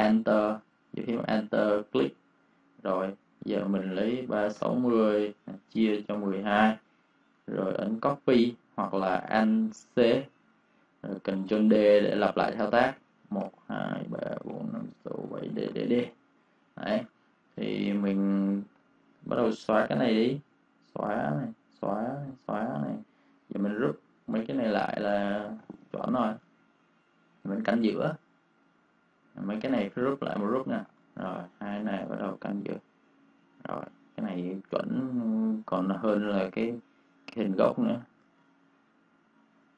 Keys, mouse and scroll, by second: 1.8 alt+click, 3.9-6.5 typing, 8.4 typing, 9.9 alt+c, 12.4 alt+c, 13.0 ctrl+d, 16.3 v, 16.7 click, 16.9 space, 17.1 click, 20.6 Delete, 21.4 click, 21.4 click, 21.7 Delete, 22.1 click, 22.3 Delete, 22.7 click, 23.9 shift+click, 25.6 ctrl+g, 26.0 click, 26.3 space, 26.4 click, 30.7 ctrl+g, 31.0 click, 33.3 space, 33.4 click, 34.7 -, 35.1 space, 35.4 click, 36.2 space, 37.0 click, 38.1 ctrl+z, 38.3 click.